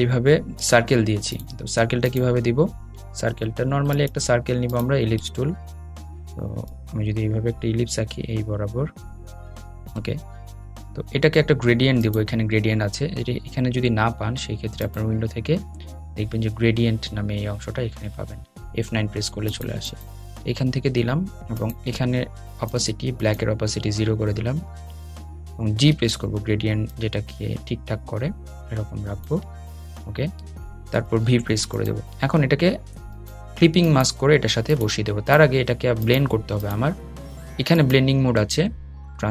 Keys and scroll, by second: 25.1 g, 32.5 v.